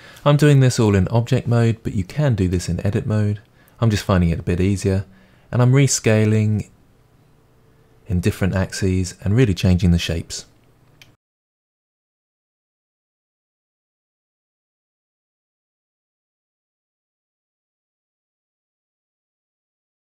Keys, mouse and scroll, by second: 0.0-15.3 typing, 1.3-1.7 drag, 2.7 click, 3.1 click, 3.6 click, 3.7 middle click, 5.1 shift+middle click, 5.2 middle click, 5.5 middle click, 5.6 shift+middle click, 5.7 middle click, 6.1 click, 6.5 middle click, 7.9 scroll down 2, 7.9 middle click, 8.3 click, 8.7 middle drag, 8.9 click, 9.6 click, 10.5 click, 10.9 middle click, 11.5 middle click, 12.2 middle click, 12.3 scroll down 2, 13.3 middle drag, 13.4 scroll down 2, 13.5 shift+middle drag, 13.7 click, 15.1 middle click, 15.4-15.9 middle drag, 15.9 click, 15.9 Tab, 16.0 middle click, 16.2 click, 16.3 middle click, 16.3 g, 16.6 Tab, 16.7-17.0 scroll down 4, 16.8 shift+middle click, 17.1 scroll up 1, 17.3 click, 17.6-20.1 typing, 17.7 middle click, 17.9 middle click, 18.3 click, 18.7 click, 19.1 click, 19.7 shift+middle click.